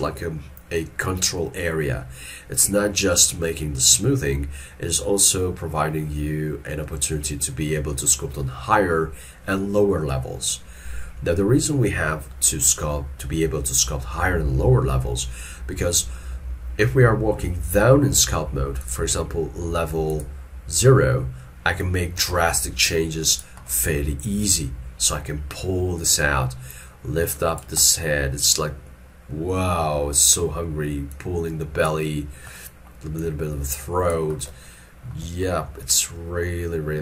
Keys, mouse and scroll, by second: 13.9 scroll up 1, 23.7 middle click, 35.5 shift+middle click.